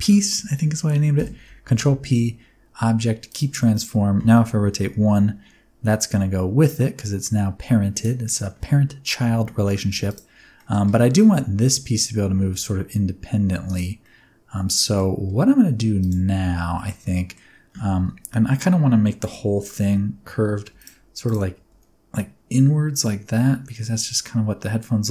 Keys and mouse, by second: 1.1 ctrl+p, 3.7 click, 4.5 r, 4.8 y, 7.9-9.2 drag, 9.4 shift+click, 10.5 middle click, 12.3 r, 13.6 click, 14.0-14.9 middle drag, 15.9 click, 16.7 shift+middle click, 17.0-17.3 middle drag, 19.2 KP_1, 21.7 r.